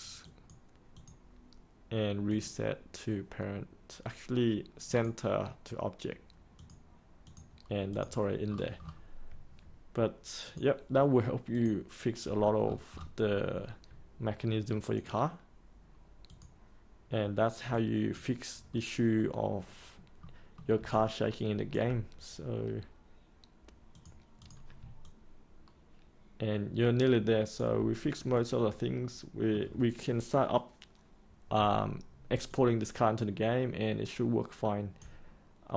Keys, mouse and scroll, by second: 10.4-12.5 drag, 12.5 scroll down 1, 14.9 click, 20.1 middle click, 20.9-23.9 alt+drag, 25.0-27.5 alt+drag, 27.9 scroll up 1, 28.2-28.8 scroll down 1, 29.0 middle click, 32.4-35.7 alt+drag.